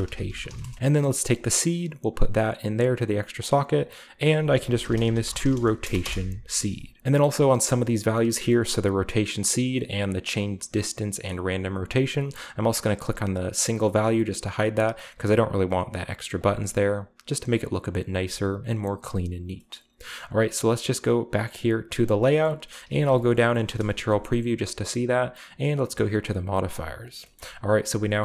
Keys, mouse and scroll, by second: 0.0-0.5 typing, 1.2-2.4 drag, 3.5 click, 4.3 shift+click, 4.7-5.8 typing, 6.0 Return, 7.0-7.6 middle drag, 10.0-12.3 drag, 13.6 click, 14.5 click, 15.2 click, 16.3-17.6 drag, 19.7-20.3 middle drag, 21.5 click, 22.1-23.0 scroll down 1, 22.2-22.9 middle drag, 22.9 z, 23.3-24.8 shift+scroll up 1, 23.7 a, 25.7-26.2 drag, 26.7 click, 27.9-28.2 drag.